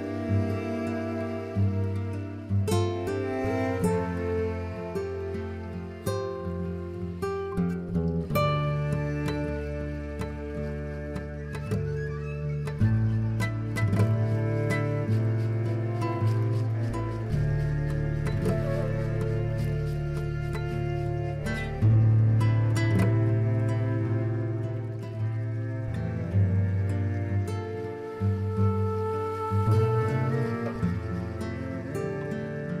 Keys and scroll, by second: 15.2 z.